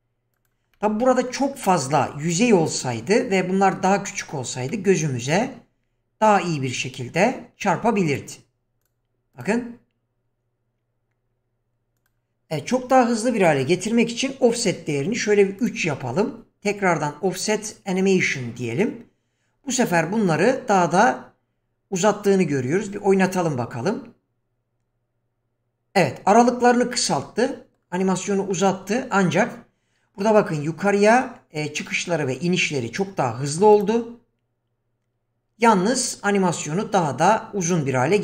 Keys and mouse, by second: 0.3 click, 0.7-1.3 middle drag, 1.6-2.0 middle drag, 4.7-5.4 middle drag, 6.7 click, 8.1 click, 9.3 click, 12.0 click, 13.5-15.7 drag, 18.2 click, 23.3 click, 27.5 middle click, 31.0 click, 33.7 click.